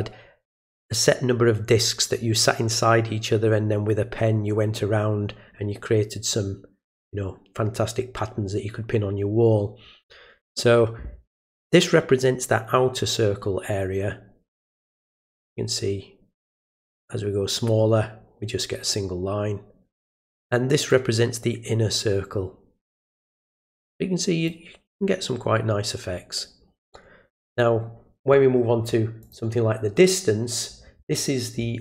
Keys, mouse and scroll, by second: 12.2-20.0 drag, 20.9-23.1 drag, 24.4 click, 29.2 click.